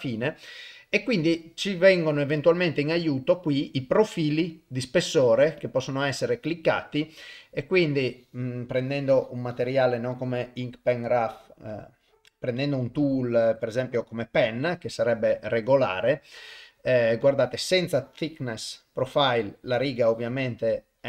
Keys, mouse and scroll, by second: 1.1 middle click, 3.4-4.5 drag, 5.6 click, 8.9 middle click, 10.4-13.9 drag, 15.8 middle click, 17.2 click, 18.0-19.1 drag, 20.0 click.